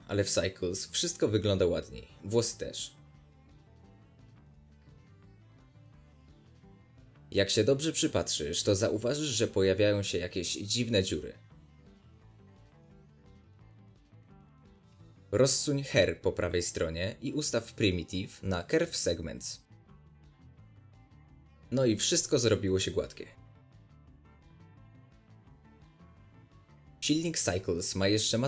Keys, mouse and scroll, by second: 2.7-6.9 drag, 6.2-6.9 scroll up 1, 6.9-10.1 middle drag, 7.8 scroll up 1, 10.1 click, 11.4 scroll up 1, 11.6-21.2 middle drag, 12.1-14.3 scroll up 2, 14.3-15.4 scroll up 1, 15.4-16.0 scroll up 1, 16.0-16.6 scroll up 1, 16.6-20.2 scroll up 1, 21.2-24.1 drag, 24.6 scroll down 2, 26.1-28.4 middle drag.